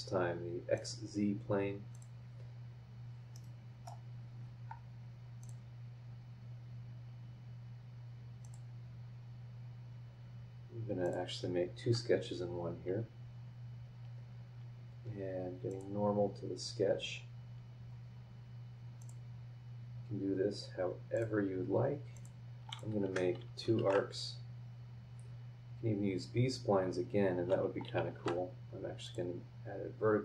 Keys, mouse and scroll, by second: 0.7 click, 1.9 click, 2.8 scroll up 1, 3.3 middle click, 5.4 click, 6.0 scroll up 2, 8.4 click, 11.0 click, 11.8 Escape, 11.9 scroll down 2, 13.6 scroll down 2, 15.7 click, 16.3 scroll down 1, 17.0 scroll down 1, 17.4 scroll up 1, 19.0 click, 21.1 click, 22.1 click, 22.7 click, 23.0 Escape, 23.8 shift+r, 25.6 scroll up 2, 26.9 scroll up 2, 28.1 shift+v, 29.0 click, 29.4-30.2 scroll down 6.